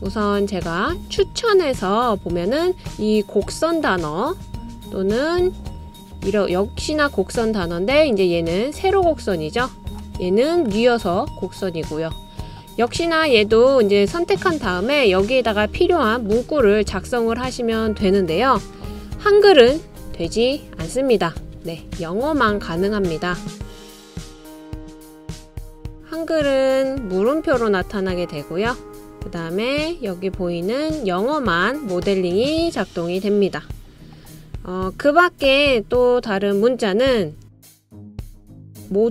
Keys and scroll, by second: 18.1 typing, 19.9 BackSpace, 20.0 BackSpace, 20.1 BackSpace, 20.6 BackSpace, 22.9-25.4 typing.